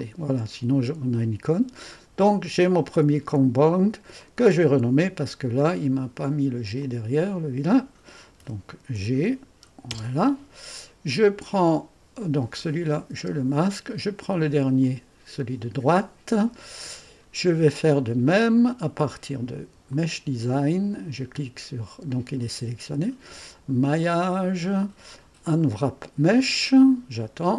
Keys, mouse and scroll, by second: 4.2 click, 6.0 F2, 6.8-8.1 drag, 8.4 -, 8.9 g, 9.9 Return, 12.5 click, 13.1 space, 14.8 click, 18.2 click, 19.9 click, 24.0 click, 25.5 click.